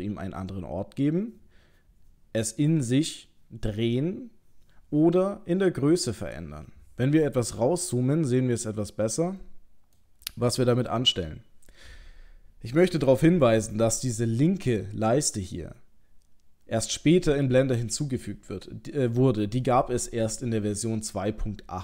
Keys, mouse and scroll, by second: 7.7-8.9 scroll down 4, 8.9 middle click.